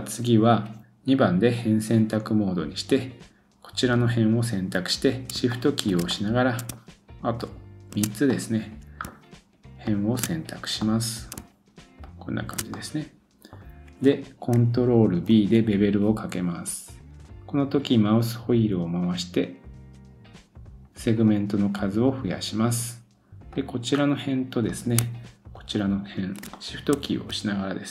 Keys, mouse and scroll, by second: 0.8 2, 2.9 click, 3.0-5.4 middle drag, 5.5 shift+middle click, 6.0 middle click, 7.4 shift+click, 8.0-9.1 middle drag, 9.8 shift+click, 10.2-11.3 middle drag, 10.5-10.8 scroll down 1, 11.3-12.6 shift+drag, 12.6-14.5 middle drag, 14.5-15.6 ctrl+drag, 15.3 ctrl+b, 15.6-19.8 middle drag, 22.3 click, 23.5 click, 23.9 scroll up 1, 24.0-25.0 middle drag, 25.7 shift+click, 26.5 middle click.